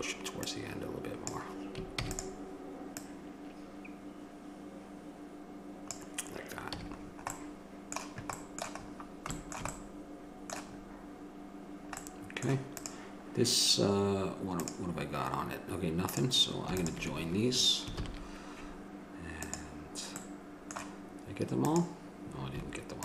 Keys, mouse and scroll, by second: 2.2 shift+d, 6.9 a, 7.3-13.0 middle drag, 13.0-21.6 right drag, 18.2 ctrl+j.